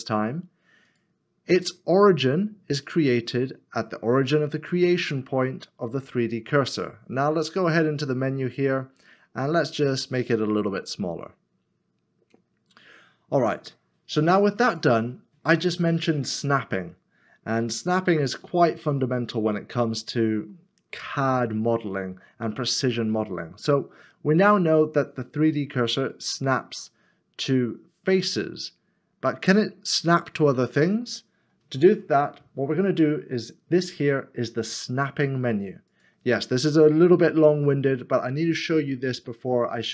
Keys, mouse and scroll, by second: 17.4 scroll up 1, 18.4 shift+middle click, 19.7 middle click, 26.2 shift+right click.